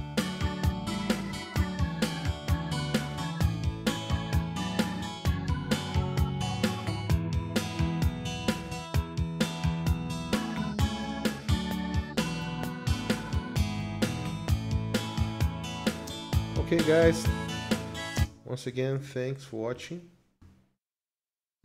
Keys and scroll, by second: 14.4 ctrl+s, 16.1 space, 18.2 space, 19.0 ctrl+s.